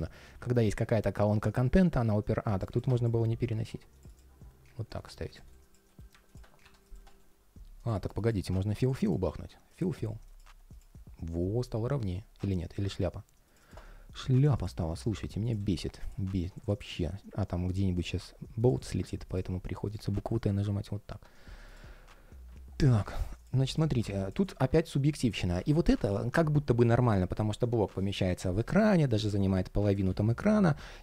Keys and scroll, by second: 5.7 ctrl+shift+4, 6.8 ctrl+shift+4, 20.8 super+/, 29.8 super+z.